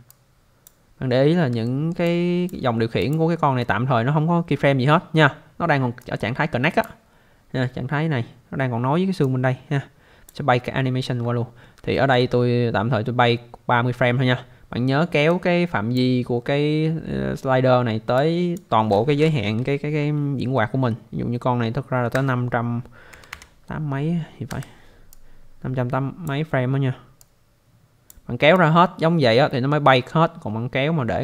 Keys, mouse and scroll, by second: 0.1 click, 1.2 scroll up 1, 1.6 alt+middle click, 2.0 alt+click, 3.0 click, 6.0 click, 9.2 click, 10.8 scroll down 1, 11.9 alt+middle click, 12.3 scroll up 1, 15.3 click, 18.2 click, 22.1-23.8 typing, 24.5 Return, 25.1 click, 27.2 click, 28.6 click.